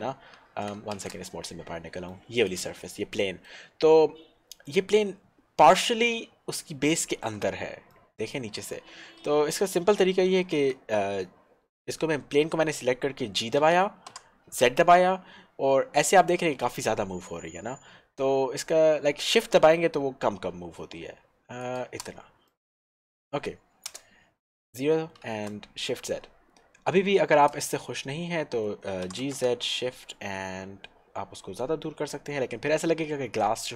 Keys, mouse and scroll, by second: 0.0 scroll down 1, 1.1 shift+z, 1.6 middle click, 2.4 click, 3.2 middle click, 3.8 scroll up 1, 4.8 middle click, 6.4-7.0 scroll up 1, 7.2 shift+middle click, 8.0 middle click, 8.3 middle click, 14.2 g, 14.7 z, 21.9 shift+click, 22.7 middle click, 24.0 shift+KP_0, 24.8 scroll up 1, 25.4 shift+z.